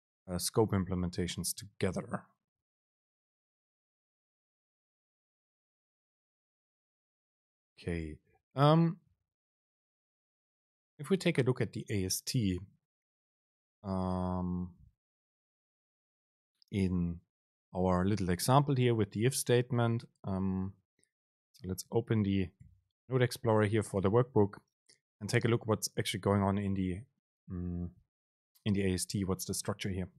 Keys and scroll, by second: 6.0 Down, 6.4 Up, 8.8 Down, 9.4 Home, 9.8 Right, 23.1 ctrl+x.